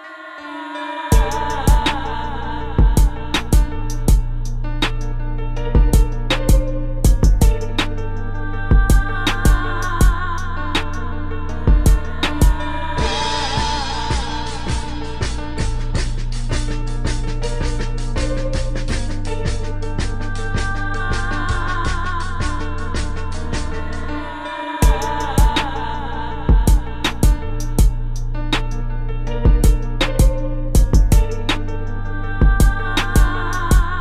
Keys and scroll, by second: 2.0-4.2 typing, 9.0 space, 13.3 space, 16.6 space, 18.3 space, 19.5 space, 20.4 space, 25.7-27.2 typing, 33.7 space.